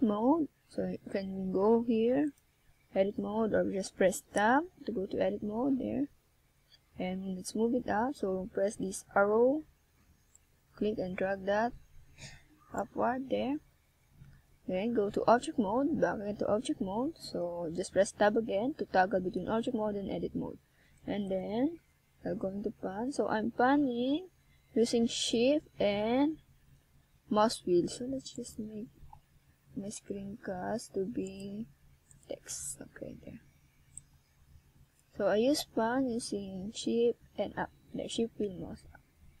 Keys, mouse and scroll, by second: 3.4-6.0 middle drag, 6.4-8.6 middle drag, 8.6-10.1 drag, 10.1-11.0 middle drag, 11.0 click, 13.8 click, 15.9 shift+scroll up 1, 19.1 s, 22.5 click, 23.4 Tab, 25.1-26.0 scroll down 3, 26.3 click, 28.3 Tab, 30.9 ctrl+scroll down 2, 31.3-31.8 ctrl+scroll up 3, 32.0-32.6 shift+scroll down 2, 32.6 shift+scroll up 1, 36.5 scroll up 2, 37.2-37.8 scroll down 1, 37.8 scroll down 1, 38.2 shift+scroll down 1, 39.0-39.4 ctrl+scroll up 2.